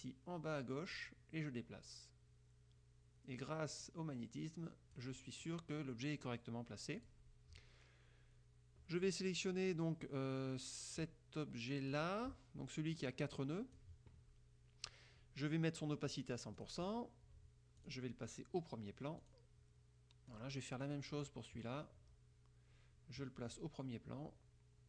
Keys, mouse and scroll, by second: 1.1-5.3 drag, 7.1 click, 9.1 click, 12.1 click, 13.1 click, 16.2 click, 16.7 click, 17.9 click, 19.3 click, 20.4 click, 21.2 click, 23.6 click.